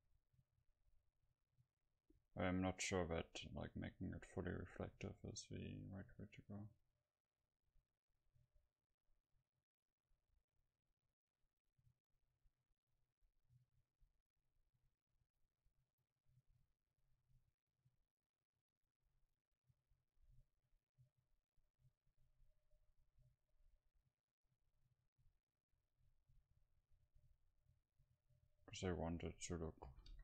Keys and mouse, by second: 14.9-20.9 middle drag, 22.8-28.1 middle drag, 28.4 middle click, 29.0-30.2 drag.